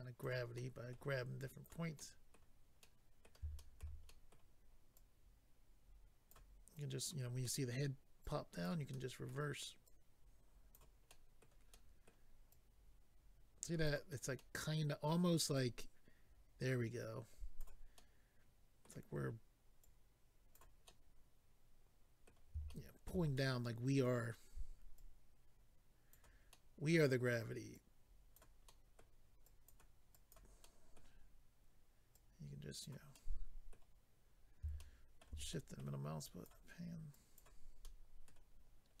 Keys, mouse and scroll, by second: 0.5 middle click, 1.3 click, 1.9 middle click, 3.6 shift+middle click, 3.8 middle click, 4.1 middle click, 5.0 click, 6.8 click, 7.4 middle click, 8.2 click, 8.9 middle click, 9.8 click, 11.1 middle click, 11.7 middle click, 12.5 click, 14.3 middle click, 15.5 click, 17.9 middle click, 19.8 click, 20.8 middle click, 22.7 shift+middle click, 23.1 middle click, 23.3 middle click, 24.9 click, 26.5 middle click, 27.7 click, 28.6 middle click, 29.4 click, 30.1 click, 30.6 middle click, 32.1 click, 33.1 middle click, 34.3-34.7 scroll up 2, 34.7 shift+middle click, 35.5 scroll up 1, 35.8 middle click, 36.2 click, 36.5 middle click, 37.8 middle click, 38.5-38.8 scroll down 1.